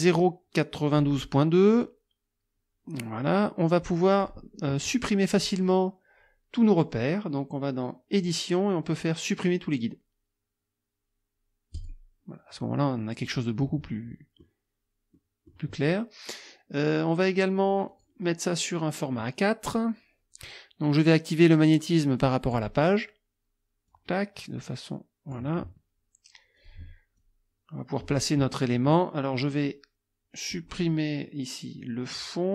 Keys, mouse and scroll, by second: 0.0 click, 0.9 click, 4.2 click, 5.4 click, 11.8 click, 13.0 middle click, 14.0 middle click, 14.1 click, 15.2 click, 17.9 click, 22.4 click, 23.9-25.5 drag, 26.6 click, 27.2-28.2 drag, 29.5 click.